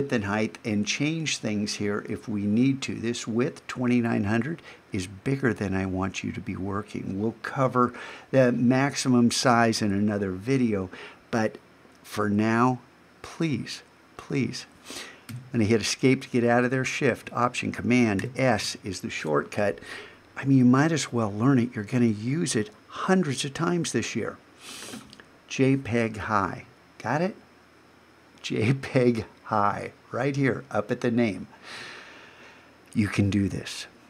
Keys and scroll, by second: 18.2 alt+shift+super+s.